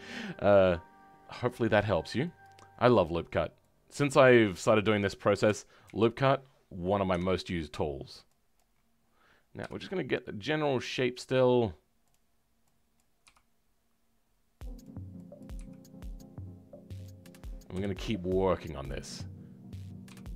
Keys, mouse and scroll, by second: 2.4-5.4 drag, 5.4 KP_3.